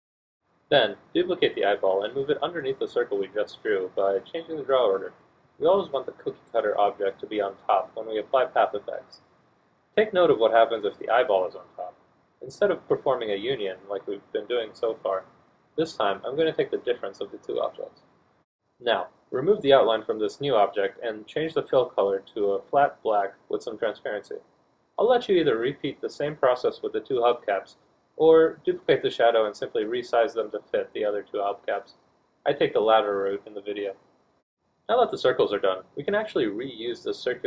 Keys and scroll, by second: 24.1 d.